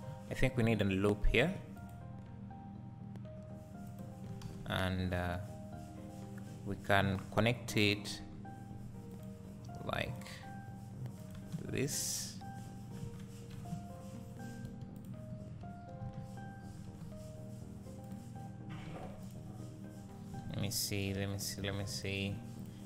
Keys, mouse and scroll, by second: 1.3 ctrl+r, 4.0 click, 4.5 alt+a, 8.2 k, 11.6 space, 13.5 space, 14.9 2, 14.9 click, 16.3 1, 16.9 alt+a, 18.0 click, 18.9 alt+a, 19.2 click, 20.5 alt+a, 21.6 1, 21.9 click, 22.6 shift+click.